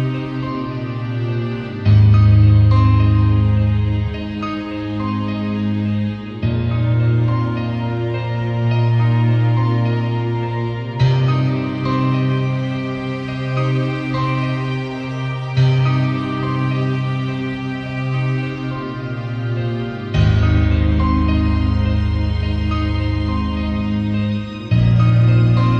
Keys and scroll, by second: 3.2 super+a, 3.6 shift+super+c, 3.9 shift+super+v, 4.6 shift+super+a.